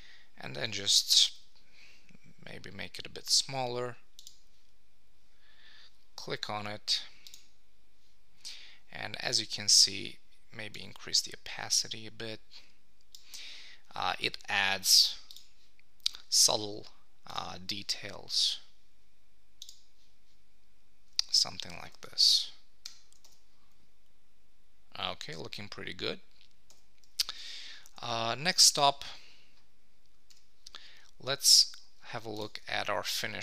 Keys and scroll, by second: 22.8 super+;, 23.2 Tab, 26.7 Tab, 28.0 super+s, 31.5 super+Tab.